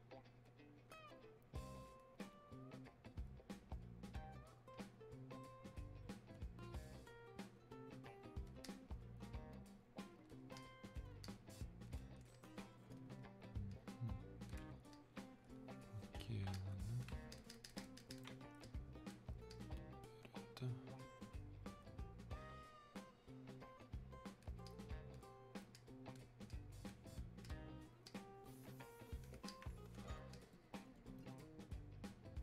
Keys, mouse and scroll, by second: 15.2-32.4 ctrl+drag.